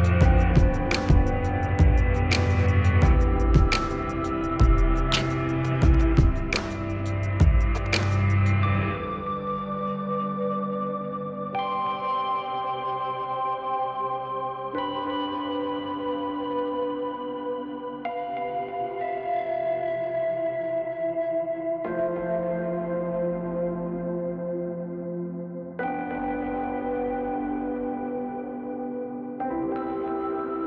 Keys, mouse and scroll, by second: 0.1 F2, 0.4-1.7 drag, 2.6 ctrl+u, 3.0 click, 4.7 ctrl+u, 4.8-7.9 drag, 7.9 F2, 8.3-16.2 drag, 16.7 space, 17.9-23.6 drag, 25.1 click, 26.0 right click, 27.2-28.5 drag, 28.5-30.6 drag.